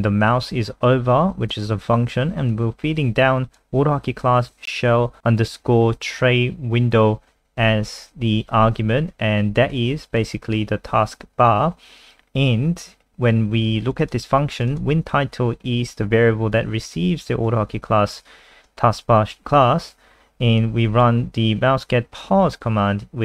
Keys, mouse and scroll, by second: 14.0 click, 14.5 click, 14.7 click, 16.8 click, 18.4-19.4 scroll down 1, 20.6 click.